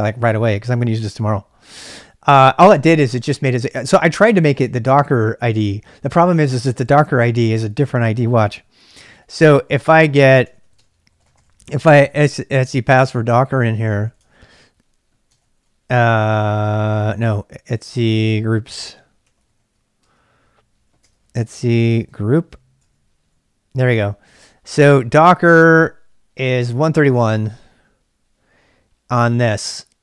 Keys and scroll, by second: 8.9 typing, 9.7 ctrl+c, 10.2-22.1 typing, 22.8 Return.